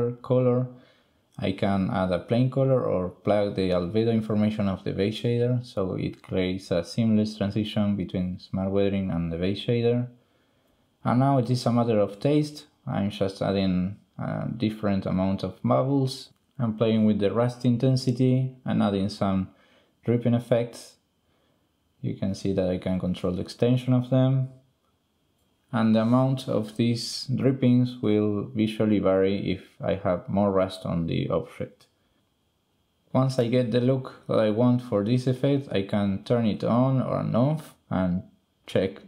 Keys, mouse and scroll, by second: 0.3-1.5 drag, 1.7 click, 2.0 click, 2.5 ctrl+x, 2.7 click, 2.9 click, 3.1 click, 3.9 shift+click, 5.8-7.2 drag, 7.4 click, 7.7 click, 9.7 click, 11.1 drag, 14.1-15.6 drag, 16.6 click, 18.8 click, 20.9-22.8 drag, 23.1-24.3 drag, 27.0-29.1 drag, 29.5 click, 35.3 click, 35.8 click, 36.6 click, 37.6 click, 37.9 shift+click, 38.2 ctrl+click, 38.6 ctrl+click.